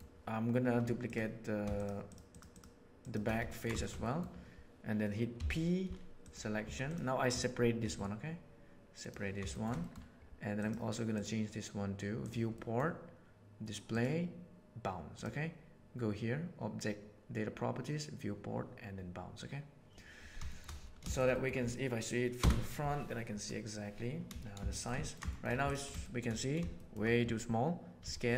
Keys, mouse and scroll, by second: 2.9 shift+right click, 3.4 ctrl+middle click, 3.8 shift+middle click, 4.0 middle click, 5.3 p, 6.6 Tab, 6.8 right click, 7.9 g, 9.5 shift+middle click, 9.7 drag, 10.5 drag, 11.1 drag, 12.2 drag, 12.6 middle click, 13.9-15.3 drag, 20.4 shift+middle drag, 21.0 shift+middle click, 21.3 middle click, 22.3 KP_1, 24.7 shift+middle drag, 25.0 ctrl+middle click, 25.3 shift+middle click, 25.7 drag, 26.0 shift+middle click, 26.7 shift+middle click, 28.0 s.